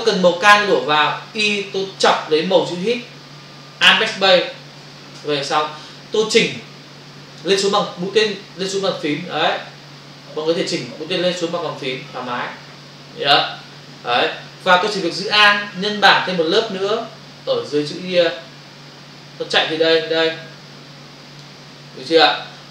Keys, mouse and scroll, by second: 2.8 click, 3.9 alt+BackSpace, 16.6 alt+click.